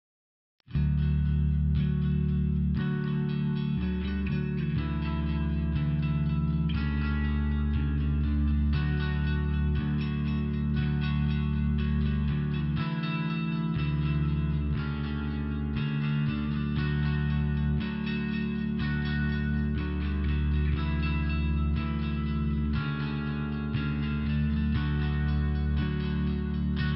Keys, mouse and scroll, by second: 1.4 click, 1.9 click, 2.0 click, 3.2 click, 12.1 click, 12.4 click, 12.8 click, 15.3 click, 15.9 click, 16.6 click, 16.7 click, 18.8-19.4 scroll down 1, 19.4 click, 21.3-22.5 scroll down 2, 22.5 click, 22.7 click, 22.9 double click, 23.8 double click, 24.7 click, 24.8 click, 25.2 click, 26.2 BackSpace.